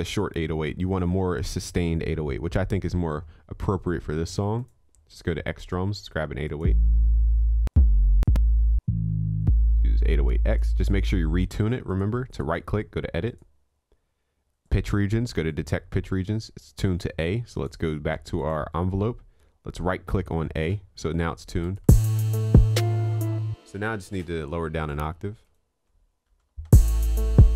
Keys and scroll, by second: 25.9 ctrl+a, 26.4 ctrl+j.